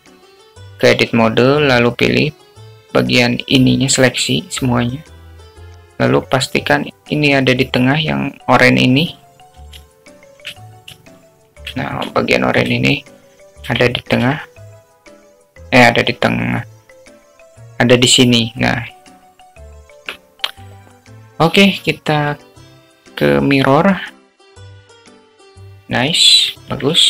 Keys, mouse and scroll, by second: 1.6 Tab, 3.0 a, 4.7-9.1 drag, 11.9 shift+middle click, 13.1 shift+middle click, 14.2 shift+middle click, 15.6 g, 21.9 Tab, 24.3-24.8 drag, 26.7-27.0 alt+middle drag.